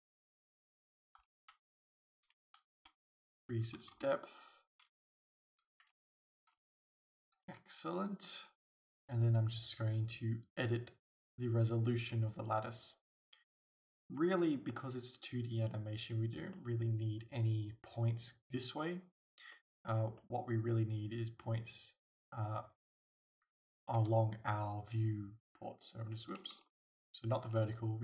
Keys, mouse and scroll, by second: 0.7 click, 1.2 s, 2.2 right click, 2.8 s, 5.6 click, 5.9 g, 6.5 click, 6.6 s, 7.3 click, 7.5 g, 8.1 click, 8.4 g, 10.5 click, 12.1-16.6 drag, 16.6-25.7 middle drag, 24.0 KP_0, 25.7-28.0 drag, 26.7 ctrl+z.